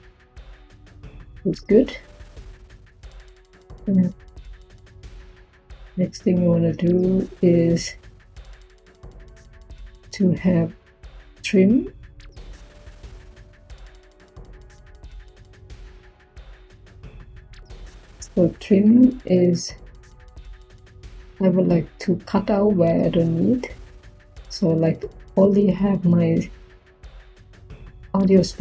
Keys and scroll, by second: 5.1 Tab, 10.7-11.5 typing.